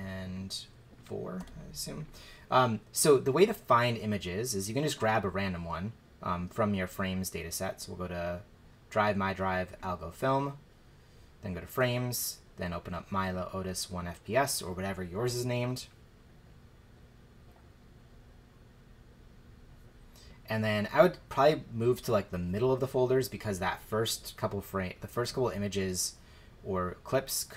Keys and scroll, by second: 1.4 4.